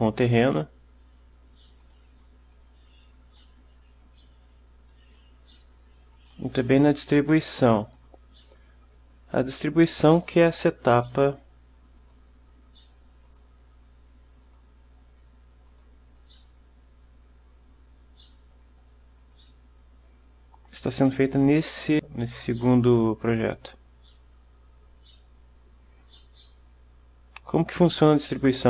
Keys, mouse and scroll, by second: 0.0-2.2 right drag, 0.5-2.2 drag, 2.3-3.7 right drag, 2.6 click, 3.9-5.2 right drag, 5.7 right click, 6.2 click, 6.7-8.3 right drag, 7.3 click, 12.1 click, 13.4 click, 14.5 click, 15.8 click, 19.3 click.